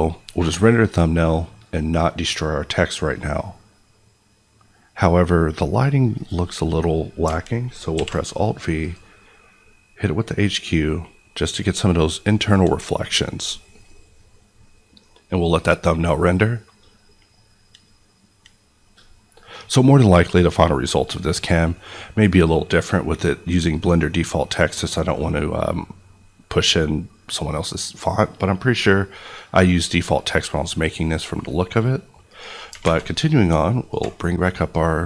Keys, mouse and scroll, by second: 7.9 alt+v, 8.8 click, 32.8 alt+Tab, 33.9 alt+click.